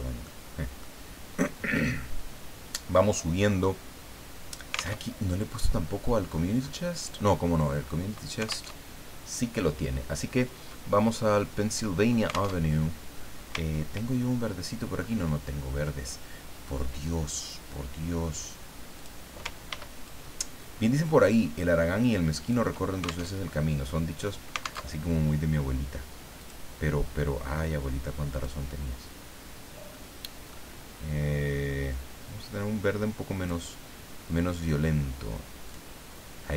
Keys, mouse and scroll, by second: 0.2 click, 1.7-3.3 drag, 5.0 alt+Tab, 5.6-6.2 scroll down 4, 6.2-6.8 scroll up 2, 7.2 scroll down 2, 7.5 middle click, 7.8-8.1 scroll up 2, 8.1 alt+middle click, 8.7 alt+Tab, 12.6 alt+Tab, 13.6-14.3 ctrl+scroll down 4, 15.0-15.4 ctrl+scroll up 2, 18.9 click, 19.7 ctrl+d, 20.1-22.7 ctrl+drag, 23.3 ctrl+alt+Tab, 24.8 alt+Tab, 26.4 click, 28.3 click, 29.9 middle click, 31.9-33.7 drag, 35.7 click.